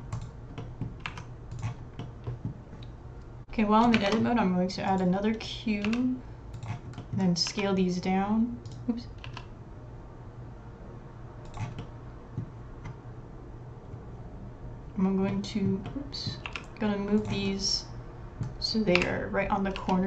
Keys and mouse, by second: 1.0 Tab, 1.5 click, 2.0-2.4 middle drag, 3.4 Tab, 3.9 shift+a, 5.8 g, 7.0 middle click, 7.5 s, 9.3 s, 11.8 middle click, 15.3 middle click, 15.9 middle click, 16.5 g, 17.5-18.5 middle drag, 19.0 g.